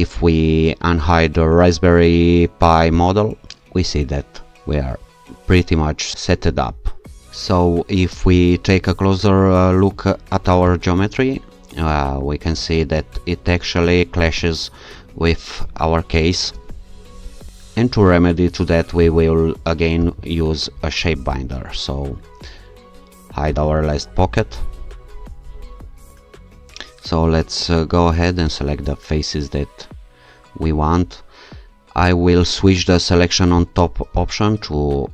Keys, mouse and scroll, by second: 3.0 click, 6.8-7.2 alt+scroll up 2, 9.2-10.3 scroll up 2, 10.6 q, 13.2-14.5 scroll down 2, 16.5 2, 20.0 shift+0, 23.6 click, 28.9 click, 31.9 q, 34.2 click.